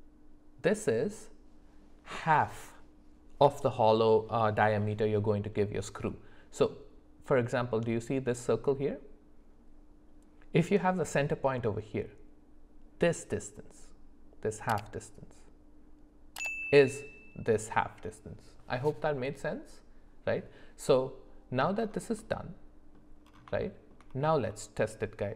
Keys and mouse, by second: 22.2 middle click, 23.6 shift+middle click, 24.5 middle click.